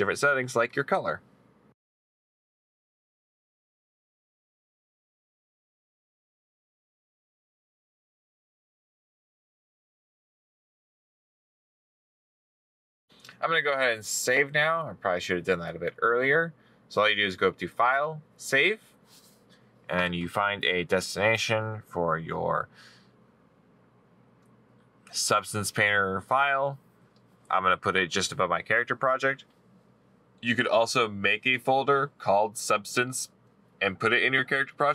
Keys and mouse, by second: 2.0 middle click, 2.2 right click, 7.7 middle click, 7.7 right click, 7.9 middle click, 9.3 right click.